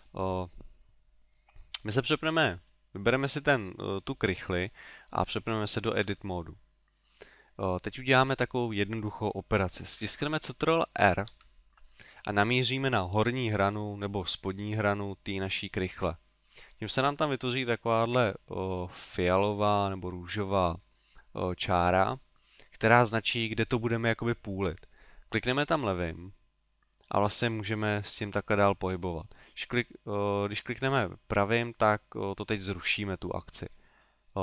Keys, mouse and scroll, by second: 2.6 right click, 6.1 Tab, 11.1 ctrl+r, 30.2 right click, 33.7 middle click.